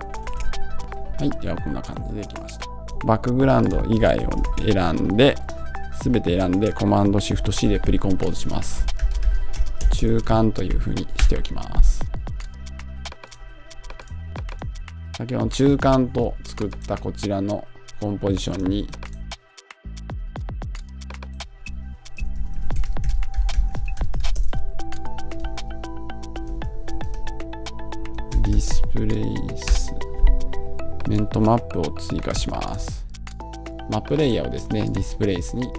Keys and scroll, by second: 0.7 Return, 11.0 Return, 29.5 Return.